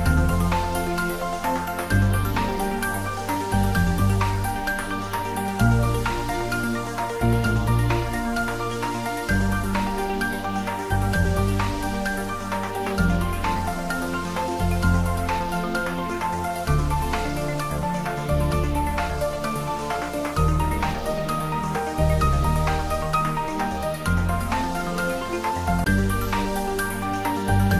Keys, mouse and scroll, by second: 3.5-4.0 scroll down 1, 4.0 3, 6.2-6.9 scroll up 1, 7.7-13.8 middle drag, 15.4-17.2 scroll up 1, 17.5 shift+click, 20.0 scroll down 1, 22.7-24.5 scroll up 1, 26.2 shift+click.